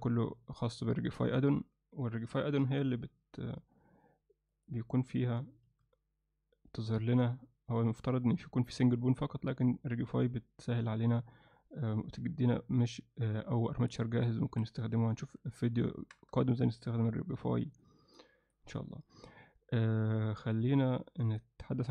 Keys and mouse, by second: 2.7 shift+a, 4.5 click, 5.7 shift+a, 15.9 Tab, 16.6 alt+shift+middle click, 17.9 click, 20.5 click, 21.3 click, 21.7 click.